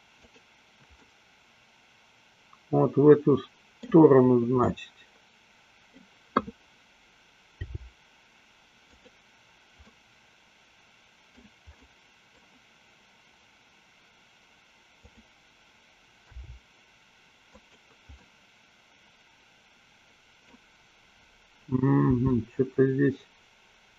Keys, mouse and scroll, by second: 0.5 click, 1.3-4.1 middle drag, 5.3-6.6 middle drag, 8.1 g, 9.3 click, 10.1-11.8 middle drag, 11.9 middle click, 14.9 click, 16.6 g, 17.9 click, 18.5-20.8 middle drag, 22.3 r.